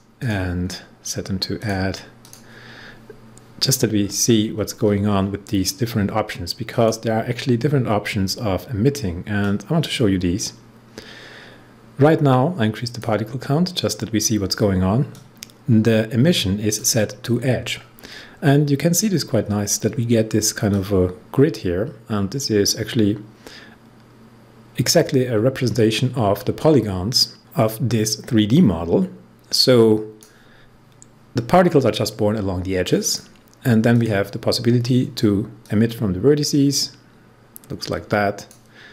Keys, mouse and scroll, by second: 0.5 scroll down 1, 1.5 click, 2.1 click, 3.9 scroll up 1, 4.5-5.1 scroll up 2, 6.6 click, 9.3-15.1 drag, 15.1-17.6 drag, 17.6 scroll down 1, 19.0 scroll up 1, 20.6-27.5 drag, 33.0-38.9 drag.